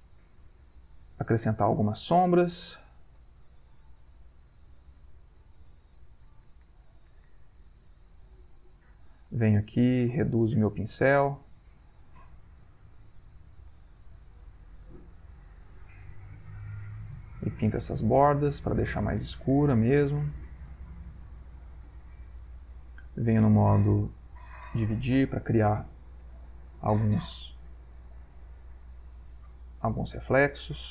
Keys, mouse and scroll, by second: 0.1 shift+click, 0.5 shift+click, 1.3 ctrl+click, 2.1-8.2 ctrl+drag, 8.5-10.5 ctrl+middle drag, 10.9 shift+click, 12.1-21.8 shift+drag, 23.3 click, 26.4-30.9 drag.